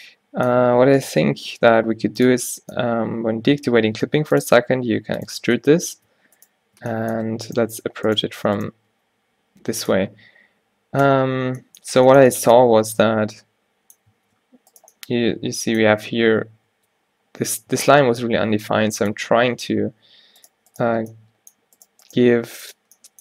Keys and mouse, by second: 2.3 middle click, 4.0 e, 6.5 middle click, 8.4 f, 9.0 g, 11.1 o, 13.6 click, 13.8 click, 13.9 click, 14.3 ctrl+r, 16.8 Tab, 17.8 Tab, 18.5 ctrl+r, 22.5 g.